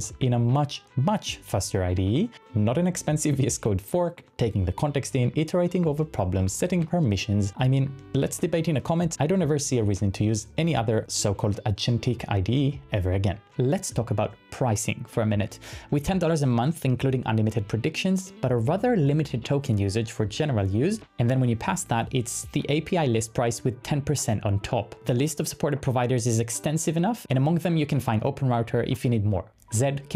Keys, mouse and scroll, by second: 0.0-2.8 typing, 4.0-8.4 typing, 9.6-10.4 typing.